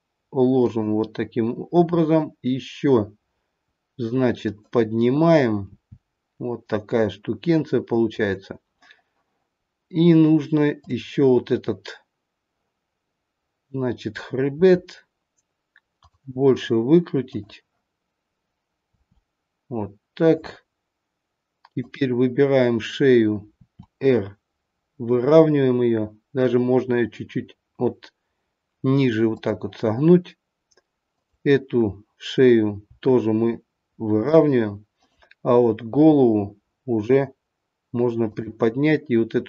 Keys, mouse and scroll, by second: 1.8 r, 5.6 g, 10.7 click, 14.6 r, 17.2 click, 18.7 r, 21.8 click, 23.6 r, 31.1 click, 32.8 r, 34.9 click, 36.2 r, 39.3 click.